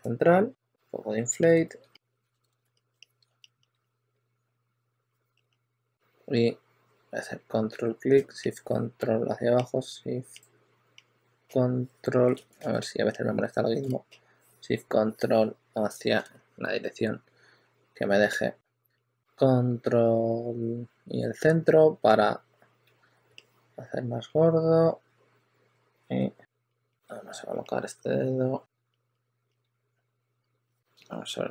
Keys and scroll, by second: 2.2 super+z, 2.8 2, 3.7 2, 3.8 2, 5.8 w, 12.5 super+z, 25.7-27.3 typing, 28.4-29.9 typing.